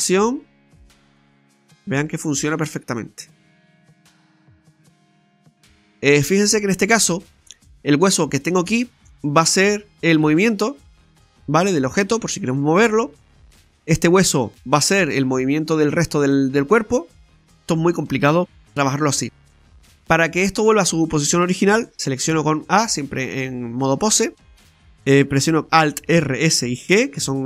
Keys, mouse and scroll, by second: 1.2 right click, 1.5 r, 3.7 right click, 3.8 r, 5.7 middle click, 7.6-8.2 scroll down 1, 8.2 right click, 8.2-9.1 scroll down 5, 8.8 middle click, 10.2 g, 12.1 middle click, 12.6 middle click, 12.6 scroll up 2, 13.6 scroll up 1, 13.6 right click, 14.9 right click, 14.9 r, 18.5 KP_3, 22.4 a.